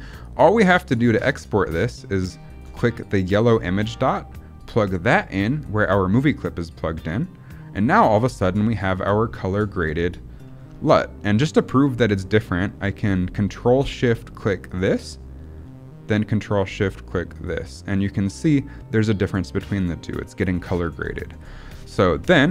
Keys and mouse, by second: 0.1 click, 1.2 middle click, 2.2 click, 2.7 middle click, 3.4-7.0 drag, 10.4 click, 11.8 click, 14.6 ctrl+shift+click, 17.2 ctrl+shift+click, 18.2 ctrl+shift+click, 18.9 ctrl+shift+click, 19.7 ctrl+shift+click, 20.3 ctrl+shift+click.